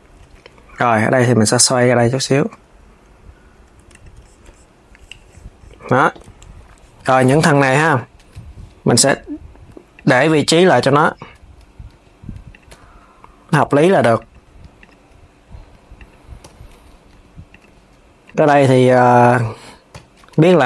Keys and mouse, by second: 1.1 r, 2.1 KP_3, 3.5 Tab, 3.6 click, 5.5 Tab, 6.8 click, 7.6 l, 10.4 click, 10.8 l, 14.4 click, 15.6 click, 16.1 l, 18.7 click, 19.6 l.